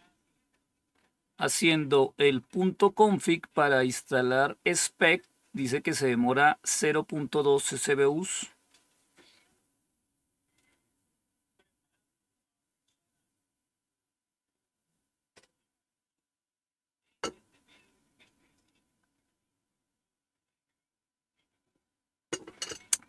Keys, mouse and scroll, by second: 0.8-1.6 scroll up 1, 2.1-2.8 scroll up 3, 7.4-8.9 scroll down 3, 8.9-12.9 scroll down 1, 12.9-13.7 scroll up 2, 13.7-23.0 scroll up 1.